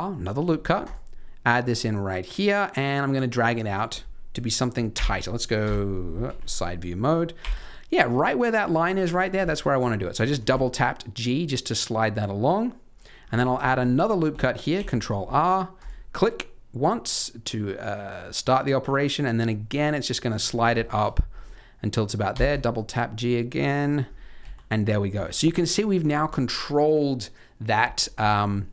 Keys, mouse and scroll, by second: 0.0 middle click, 4.9 KP_1, 5.6 KP_3, 6.2 z, 6.6-7.9 scroll up 4, 7.3 g, 9.4 shift+middle click, 10.3 g, 13.1-13.5 scroll down 8, 13.6 shift+middle click, 14.7 ctrl+r, 20.4 scroll up 4, 20.8 shift+middle click, 21.0-22.3 scroll up 3, 22.3-23.5 scroll up 1, 22.3 g, 24.0-24.3 scroll down 4, 24.4 z, 24.9 middle click, 25.2 Tab, 25.4-25.9 scroll up 2, 25.7 middle click, 28.1 scroll up 2, 28.5 middle click.